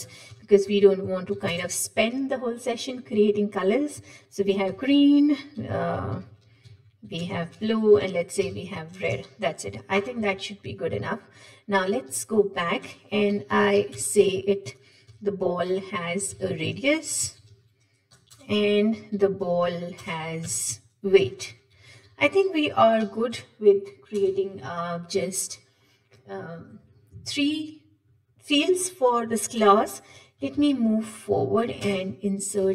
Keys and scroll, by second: 10.4 ctrl+Tab, 10.5 ctrl+Tab, 20.1 Return, 30.9 alt+Insert, 32.6 shift+Down.